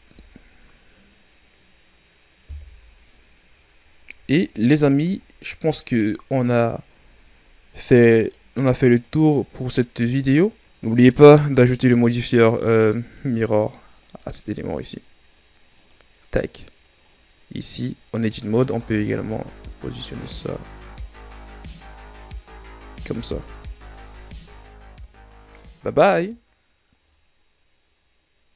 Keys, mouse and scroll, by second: 0.1 KP_3, 2.4 KP_1, 3.8-5.1 scroll down 11, 5.1-6.1 ctrl+scroll down 4, 6.1-7.0 ctrl+scroll up 3, 7.0-7.7 ctrl+scroll up 5, 7.8-8.1 scroll up 2, 8.1 right click, 9.0-10.9 right drag, 10.9-11.2 ctrl+scroll up 3, 13.0 click, 13.9-17.0 drag, 17.6 right click, 18.5 Tab, 19.2-22.2 drag, 23.1 Tab, 23.5-23.8 scroll down 2, 23.8 a, 24.6 ctrl+s, 25.2-28.2 scroll up 2.